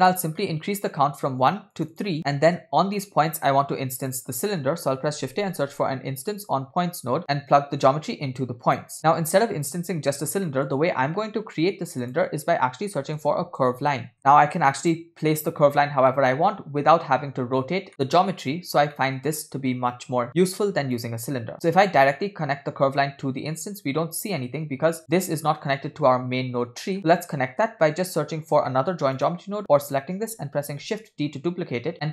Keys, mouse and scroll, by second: 0.1 middle click, 1.5 scroll up 1, 1.5 click, 1.8 click, 2.2 middle click, 2.2 scroll up 1, 3.5 shift+a, 7.9-8.9 drag, 9.8 click, 10.5 middle click, 11.3 shift+a, 16.1 middle click, 16.9-17.3 scroll down 1, 19.0 middle click, 19.9-21.1 drag, 24.8-25.1 scroll down 2, 25.1 drag, 27.0-27.7 middle drag, 27.0 scroll down 1, 28.1-28.7 scroll up 2, 28.7 scroll up 3, 28.7 middle click, 29.2 drag, 30.9 shift+d.